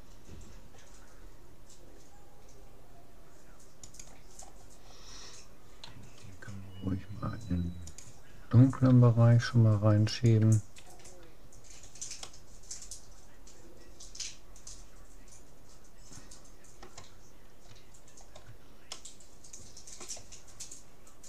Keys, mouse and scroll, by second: 4.4-6.8 middle drag, 5.8 r, 9.0 g, 10.8 a, 11.6 middle click, 12.4-14.0 drag, 18.0-20.6 middle drag.